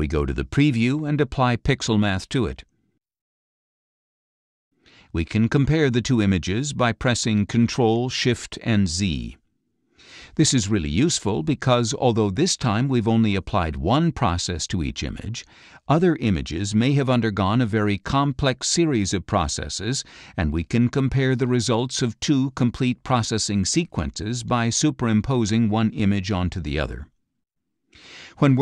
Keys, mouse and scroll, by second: 0.1 click, 3.7-5.2 drag, 5.9 click, 7.6 ctrl+shift+z, 9.0 ctrl+shift+z, 9.8 ctrl+shift+z, 10.6 ctrl+shift+z, 12.0 ctrl+shift+z, 12.8 ctrl+shift+z.